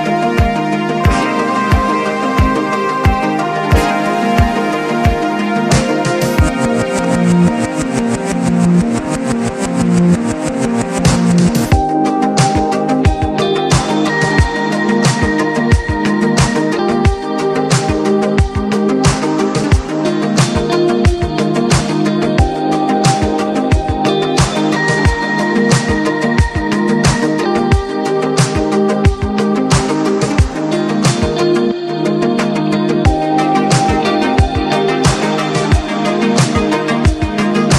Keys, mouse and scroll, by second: 0.0 click, 1.0-1.9 typing, 2.4 click, 4.2 click, 4.8 5, 5.6 click, 7.7 click, 9.2 click, 9.9 1, 11.2 click, 12.3-13.3 typing, 12.5 click, 13.3 click, 14.0 click, 14.8-15.8 typing, 17.9 click, 18.5 scroll down 1, 18.8-19.4 scroll up 1, 19.4 click, 20.7 click, 24.7 click, 26.2 click, 27.5 click, 28.2-29.0 typing, 29.1 Return, 30.0-31.3 drag, 31.0-31.9 typing, 32.5 click, 34.9 click.